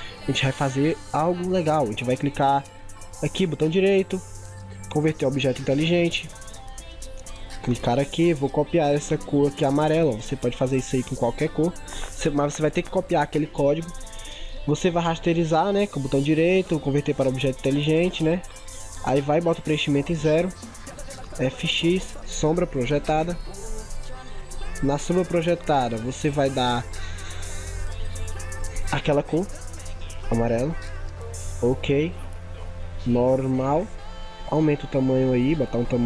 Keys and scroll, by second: 10.2 ctrl+c, 30.3 ctrl+v.